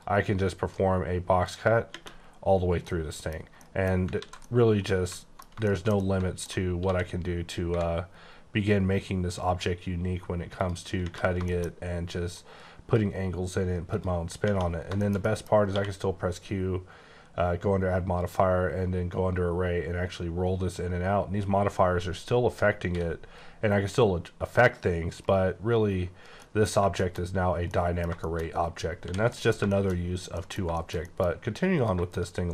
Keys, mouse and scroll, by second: 0.0 click, 1.4 click, 1.9 space, 2.6 scroll up 3, 2.9 middle click, 3.3-3.9 scroll down 4, 3.5 middle click, 4.2 ctrl+z, 4.4 middle click, 5.6 shift+middle click, 6.6 scroll down 2, 6.8 d, 8.7 click, 10.6 click, 11.0 space, 11.4 shift+scroll down 1, 11.5 shift+middle click, 11.7-12.3 scroll up 4, 12.3 click, 13.9 click, 14.7 scroll down 5, 15.0 shift+middle click, 15.5 scroll up 1, 18.2 click, 18.6-19.2 scroll down 4, 19.3-19.6 scroll up 4, 19.6 scroll down 4, 19.9 scroll up 6, 20.3-20.7 scroll down 6, 20.7-21.1 scroll up 4, 21.2-21.5 scroll down 3, 21.5-21.9 scroll up 2, 25.2 right click, 26.3 middle click, 28.0 scroll down 2, 28.2 shift+middle click, 28.6 scroll up 2, 29.0 h, 29.3 middle click, 30.0 scroll up 2, 30.4 middle click, 31.8 click.